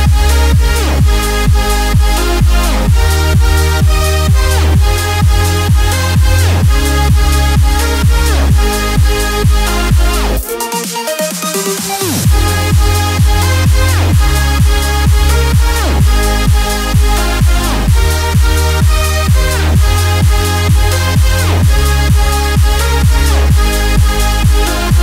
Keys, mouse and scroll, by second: 11.2-18.1 drag, 19.1-21.2 alt+shift+drag.